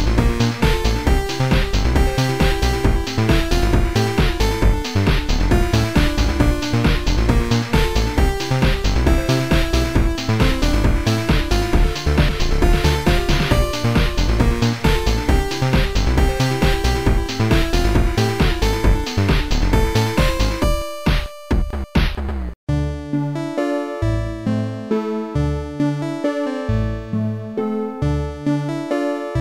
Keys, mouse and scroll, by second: 1.5 Delete, 1.5 click, 1.6 click, 2.2 click, 2.7 Delete, 3.3 click, 4.7 click, 5.6 click, 7.2 click, 8.0 click, 8.4 click, 9.7 click, 11.7 click, 12.9 click, 13.8 click, 15.3 click, 16.2 click, 18.0 click, 18.3 right click, 20.2 click, 20.2 right click, 24.0 click, 26.5 click, 27.7 click, 28.7 click.